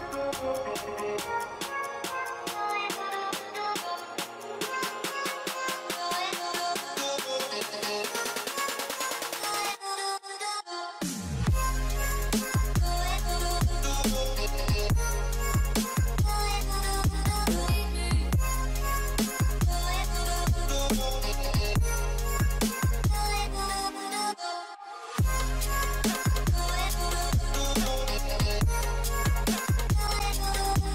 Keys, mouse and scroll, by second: 0.5 alt+click, 2.1 alt+click, 3.5 alt+click, 5.6-6.0 alt+scroll down 1, 6.4 alt+click, 7.0 alt+scroll up 1, 9.0 alt+scroll down 1, 9.7 alt+scroll up 1, 9.9 scroll down 1, 11.1 alt+click, 13.9-14.2 alt+scroll up 1, 14.6 alt+click, 16.9 scroll up 1, 17.4 alt+click, 19.6 alt+click, 19.9-20.9 scroll down 2, 22.1 alt+click, 23.6-24.0 alt+scroll down 1, 27.0 alt+scroll up 1, 28.7 alt+scroll up 1, 30.6 scroll down 1.